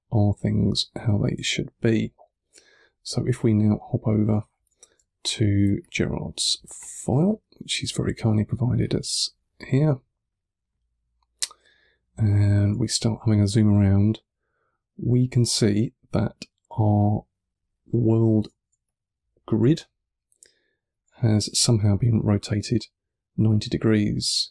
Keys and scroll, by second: 0.1 1, 1.2 3, 12.6 3, 18.6 1, 21.4 3.